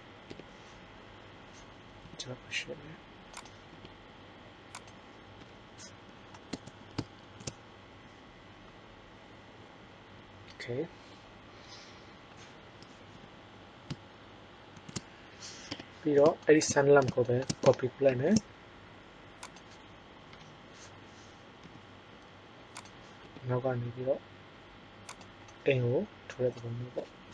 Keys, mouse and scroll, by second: 0.2 KP_5, 1.9 g, 3.6 r, 5.4 KP_0, 7.1 shift+z, 14.7 shift+z, 15.6 KP_1, 18.3 shift+d, 20.3 KP_7, 21.6 g, 23.2 r, 26.9 KP_0.